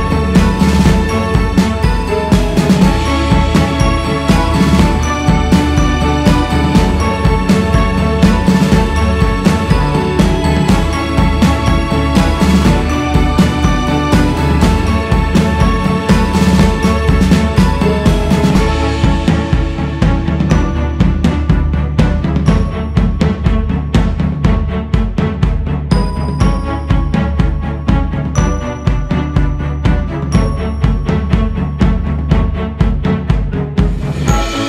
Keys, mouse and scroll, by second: 3.0 q, 5.0 click, 5.4-6.2 scroll up 1, 6.2-13.2 drag, 13.2 shift+s, 13.6 f, 14.5-16.8 drag, 16.8 g, 17.0-17.9 scroll up 2, 17.9 scroll up 1, 18.1-19.8 drag, 19.8 shift+s, 21.0-24.0 drag, 24.0-24.6 scroll down 3, 24.6-29.8 drag, 29.8 x, 30.0 f, 31.7-34.1 drag, 34.1 shift+s, 34.3 f.